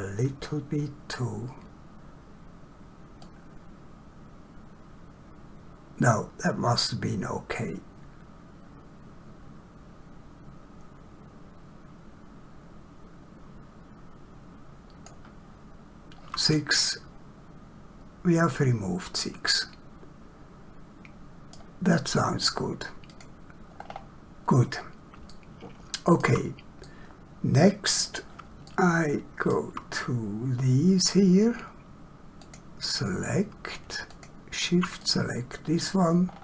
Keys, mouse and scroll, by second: 16.5 middle click, 23.1 click, 24.0-25.0 scroll down 1, 25.3 shift+middle click, 26.8 middle click, 28.7 shift+middle click, 29.9 middle click, 32.4 click, 34.1 shift+click, 35.0 middle click, 36.3 scroll down 1.